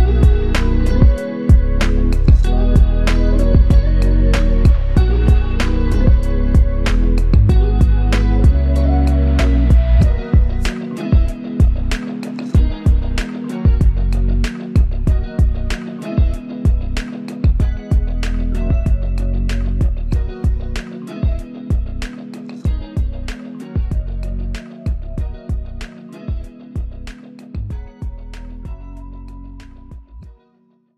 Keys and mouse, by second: 1.3 shift+click, 4.9 alt+click, 8.0 alt+click, 20.3 shift+click, 20.6 shift+double click, 20.9 shift+click.